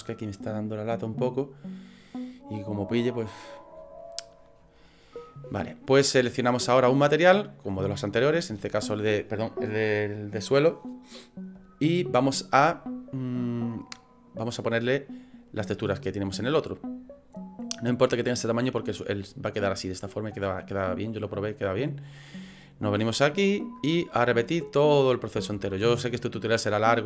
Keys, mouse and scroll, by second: 7.2 click, 13.3 scroll down 2, 14.1 middle click, 16.0 scroll up 4, 17.8 scroll up 3, 18.5 scroll down 2, 23.5 click.